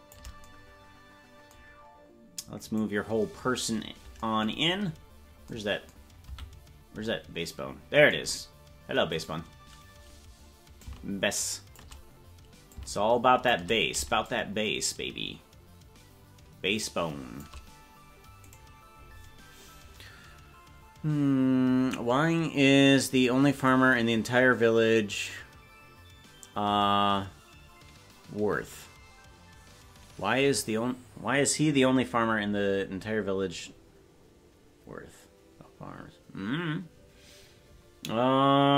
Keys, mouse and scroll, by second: 2.7 right click, 4.7-5.4 scroll down 2, 6.3 a, 9.2 right click, 10.8-12.0 drag, 12.7 click, 14.2-17.4 shift+drag, 18.5 right click.